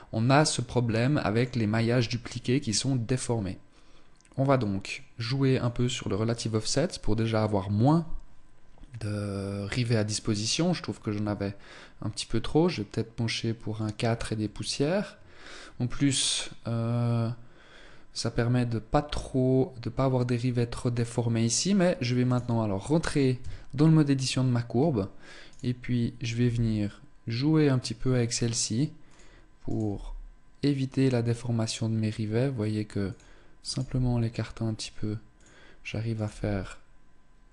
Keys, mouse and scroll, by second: 0.0-0.4 scroll up 1, 0.4 shift+middle click, 4.1 click, 5.2 click, 10.0 click, 21.8 right click, 23.0 Tab, 23.7 right click, 24.3-25.0 scroll up 1, 25.0 right click, 25.9 g, 29.2 right click, 29.4 g, 33.2 right click, 33.4 g, 35.0 click, 35.7 right click, 35.9 g.